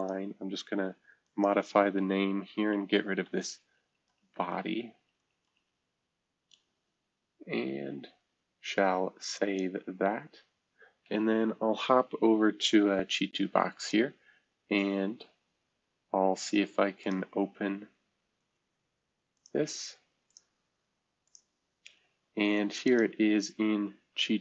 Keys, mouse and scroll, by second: 0.0-4.2 drag, 4.5 BackSpace, 9.3-11.1 drag, 13.7-15.4 drag, 17.0 click, 19.3 click, 20.3 click, 21.2 click, 21.5-23.0 drag.